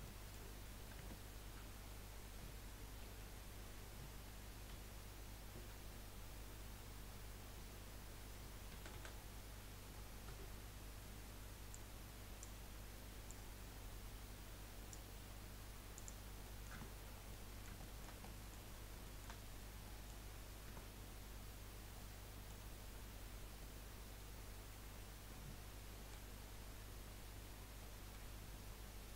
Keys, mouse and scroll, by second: 1.0 Tab, 3.0 KP_1, 4.9 z, 8.7 a, 8.9 a, 10.3 b, 13.3 click, 16.0 click, 16.4 middle click, 16.7 Tab, 17.0-17.4 scroll down 5, 17.4-18.7 middle drag, 18.7 scroll up 2, 19.1-20.6 shift+middle drag, 20.6 Tab, 22.0-24.1 middle drag, 24.1-24.4 scroll down 3, 26.0 KP_1, 28.2 KP_3.